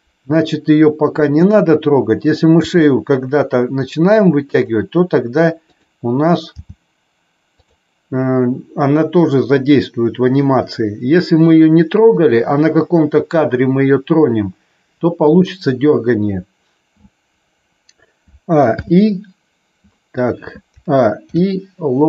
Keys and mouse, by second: 1.4 click, 2.5 g, 4.5 click, 5.6 click, 6.6 g, 7.5 click, 18.6 alt+i, 21.2 ctrl+i.